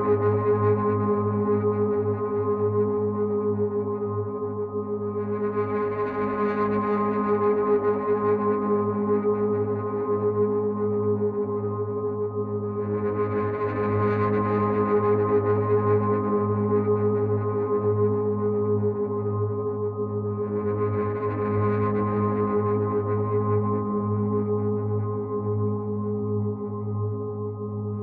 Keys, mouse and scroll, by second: 0.9 right click, 2.8 click, 6.5 right click, 8.7 click, 12.2 click, 13.3 click, 21.7 Left, 24.5 Down, 25.2 Left, 26.4 Right.